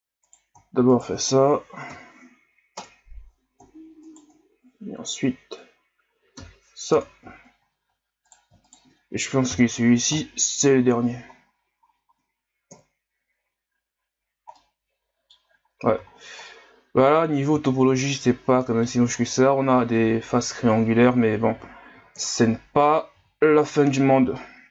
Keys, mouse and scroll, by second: 0.3 right click, 0.9 shift+right click, 1.9 m, 4.0 shift+right click, 6.4 m, 7.6 shift+scroll up 5, 8.3 right click, 9.5 m, 11.0-12.7 scroll down 8, 12.7 KP_1, 14.2 scroll down 5, 14.6 middle click, 15.4 scroll up 6, 16.1 ctrl+scroll up 5, 16.5-17.8 middle drag, 17.8-18.1 shift+scroll down 2, 18.1 middle click, 19.1-22.1 scroll up 5, 22.2 KP_1, 23.2 z, 23.9-24.7 scroll down 2.